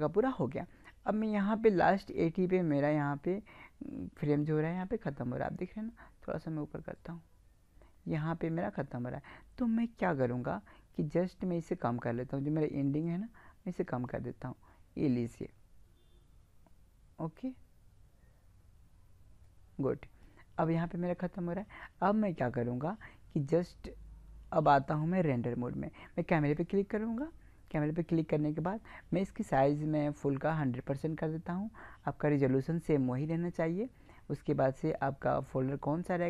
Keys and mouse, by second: 7.0-8.7 drag, 13.0-14.9 drag, 24.8-28.4 drag, 29.4-31.1 drag, 36.1 click.